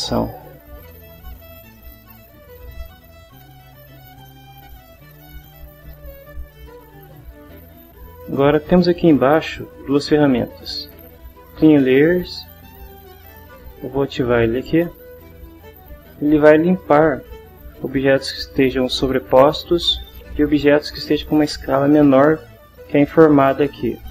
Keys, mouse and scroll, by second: 3.9 click, 5.1 click, 14.9 click.